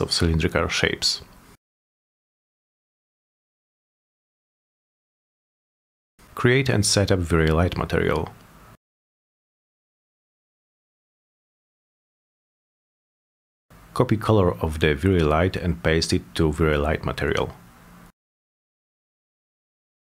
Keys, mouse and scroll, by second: 0.6 click, 1.6 middle click, 2.6 m, 3.6 middle click, 4.3 click, 4.7-6.3 typing, 6.4 click, 8.1 click, 8.3 click, 9.2 click, 11.2 click, 12.1 click, 12.3 2, 13.1 Return, 13.6 middle click, 14.5 click, 15.9 click, 16.9 right click, 17.1 right click, 18.6 click, 18.9 click, 19.4 click, 19.9 click.